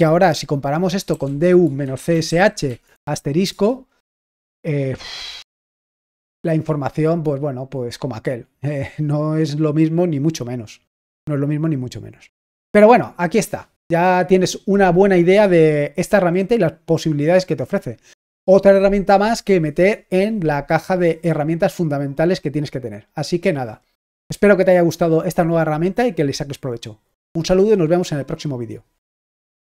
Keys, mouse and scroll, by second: 29.5 click.